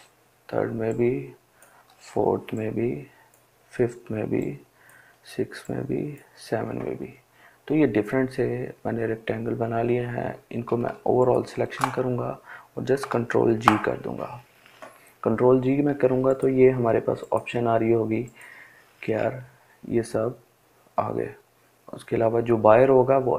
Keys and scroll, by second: 12.8 ctrl+g.